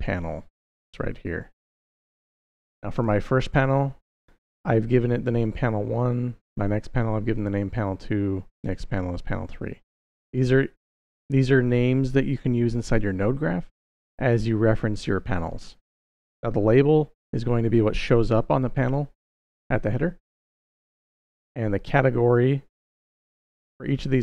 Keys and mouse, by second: 2.4 click, 2.7 click.